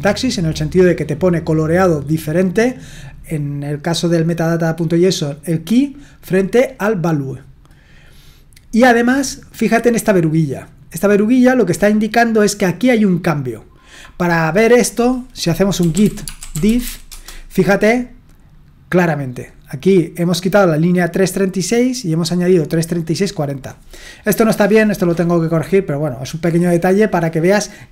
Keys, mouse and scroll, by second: 1.4-4.7 drag, 6.6-15.8 drag, 15.5-17.3 typing, 19.2-23.6 drag.